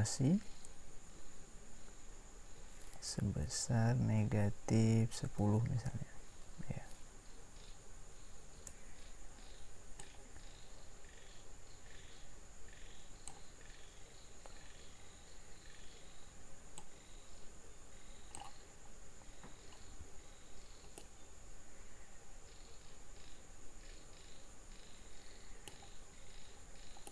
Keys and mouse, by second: 1.1 r, 4.2 r, 10.0-12.5 drag, 16.8 click, 21.0-22.2 middle drag.